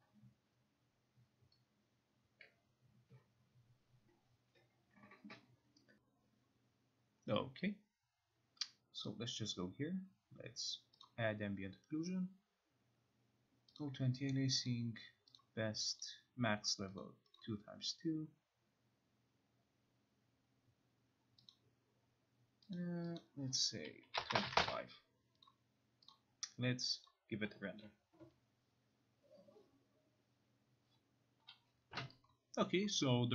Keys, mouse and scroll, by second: 5.9 Home, 9.2 click, 11.2 click, 13.9 click, 14.8 click, 15.5 click, 16.2 click, 17.1 click, 17.5 click, 21.6 click, 22.9 click, 23.3 click, 23.9-24.9 typing, 25.6 click, 26.2 click, 27.2 click, 27.7 scroll, 28.4-29.5 scroll, 31.6 Home.